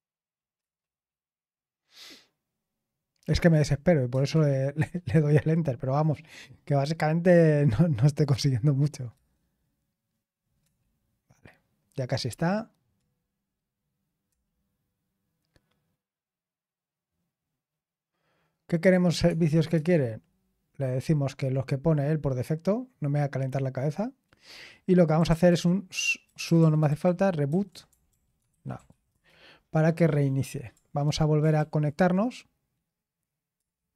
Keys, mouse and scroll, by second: 0.6 Return, 4.1 Return, 4.7 typing, 9.1 Return, 10.6 typing, 14.2 Return, 19.2 Tab, 19.7 Return, 24.9-29.3 typing, 31.5 ctrl+p, 33.5 Return.